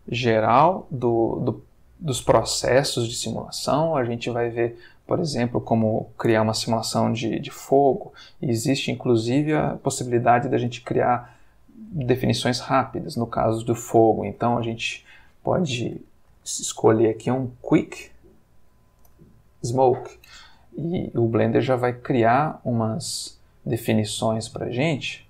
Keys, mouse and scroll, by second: 4.4 Escape, 5.1 click, 10.3 F3, 14.3 q, 14.4 u, 14.5 i, 14.6 c, 17.7 Down, 19.0 Return, 21.1-22.1 drag, 22.1 space, 22.1-25.2 middle drag.